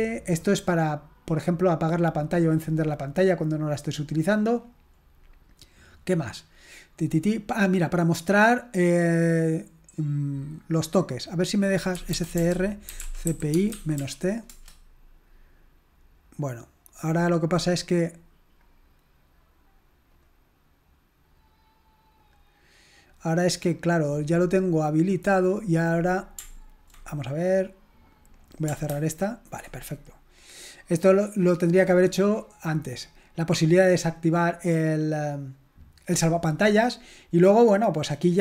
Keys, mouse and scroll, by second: 0.3-0.9 scroll up 1, 2.7-3.3 scroll down 1, 6.2 scroll down 1, 11.4 click, 11.9-14.5 typing, 17.7 click, 18.7-19.9 drag, 20.2 click, 22.2 click, 25.4 click, 28.4 click, 28.9 ctrl+c, 32.9-33.9 scroll down 1, 36.5-36.9 scroll down 1.